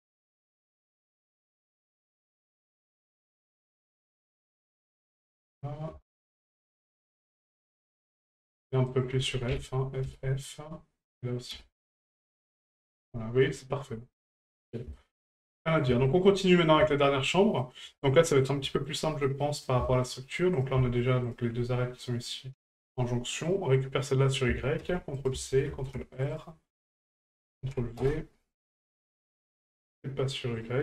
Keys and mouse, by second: 0.1 shift+right click, 0.6 shift+right click, 1.9 right click, 2.6 shift+right click, 3.1 shift+right click, 3.9 shift+right click, 5.4 right click, 6.5 shift+right click, 7.1 shift+right click, 8.9 right click, 11.1 right click, 13.5 middle click, 14.9 shift+middle click, 15.5 middle click, 16.1 shift+middle click, 16.4 middle click, 16.9 shift+middle click, 17.3 middle click, 17.9 shift+middle click, 18.2 middle click, 18.7 shift+middle click, 19.4 middle click, 19.8 shift+middle click, 20.5 right click, 21.3 shift+right click, 23.4 right click, 24.5 ctrl+click, 26.1 ctrl+r, 27.1 ctrl+click, 30.5 right click.